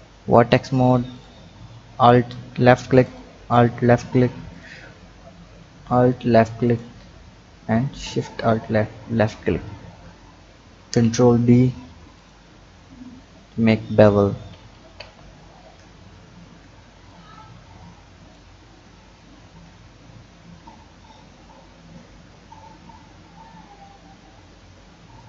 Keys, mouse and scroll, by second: 1.1 alt+click, 3.0 alt+shift+click, 4.5 alt+shift+click, 5.6 ctrl+z, 6.6 alt+shift+click, 8.0 alt+shift+click, 9.3 click, 10.7 ctrl+b, 12.5 Tab, 12.9-13.9 scroll down 2, 13.9-14.5 scroll up 3, 14.5 ctrl+z, 15.0 ctrl+z, 17.1 click, 19.3 ctrl+b.